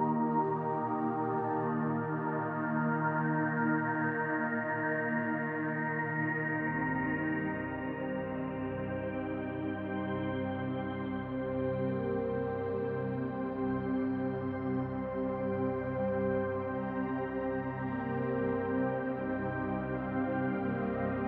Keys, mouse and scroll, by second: 2.3 click, 3.7 middle click, 5.8 click, 8.4 click, 11.7 click, 19.4 click.